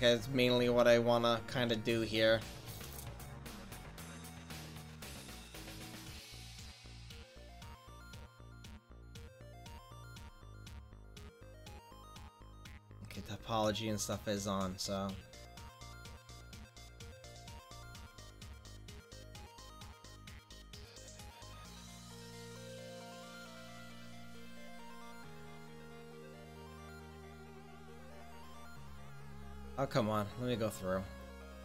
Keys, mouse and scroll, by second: 0.5-1.1 middle drag, 1.1-2.2 drag, 4.6 middle click, 8.5-9.6 drag, 10.3-13.2 middle drag, 13.2-16.5 drag, 17.3-17.9 middle drag, 29.3 click, 29.9 middle click, 30.4 click, 30.8-31.6 middle drag.